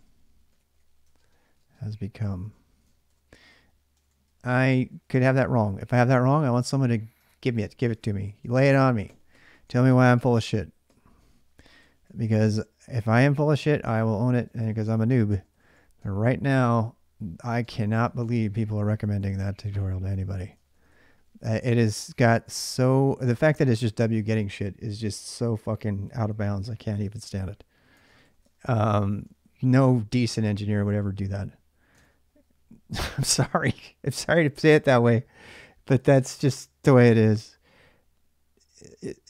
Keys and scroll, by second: 0.0-18.5 typing, 7.8 ctrl+[, 8.1 ctrl+j, 19.1 ctrl+[, 20.0 ctrl+[, 20.1-23.0 typing, 21.7 ctrl+[, 27.8-30.1 typing, 31.7 alt+Tab.